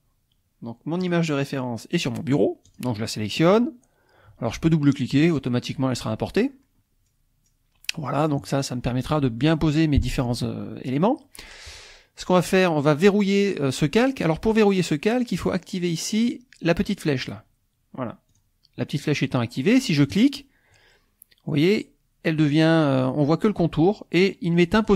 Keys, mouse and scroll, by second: 1.0 click, 2.8 click, 4.9 click, 7.0-7.6 scroll down 1, 8.0 scroll up 1, 15.3 click, 17.2 click, 18.3 click, 20.1 click.